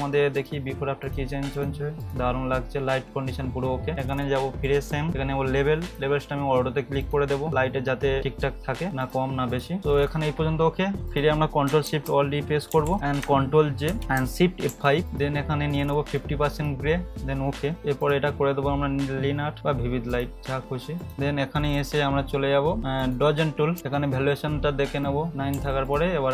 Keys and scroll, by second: 9.8 ], 12.7 ctrl+alt+shift+e, 13.9 ctrl+j, 14.7 ctrl+shift+F5, 23.8 [.